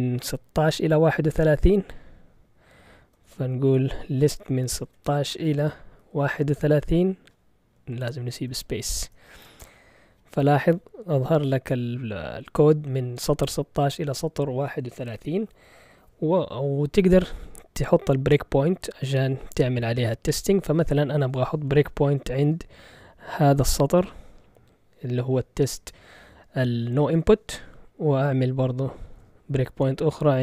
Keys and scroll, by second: 3.2 ctrl+l, 4.0-6.8 typing, 7.6 Up, 7.7 Left, 8.2 Left, 8.4 Left, 8.5 Left, 8.6-9.6 typing.